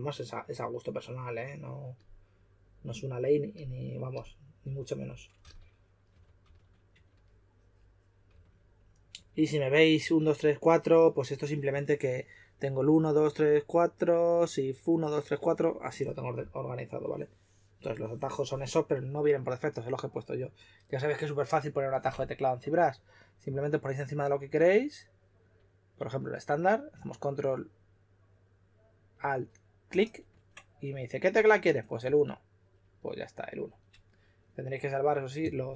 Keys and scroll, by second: 5.1-10.6 typing, 33.3 typing.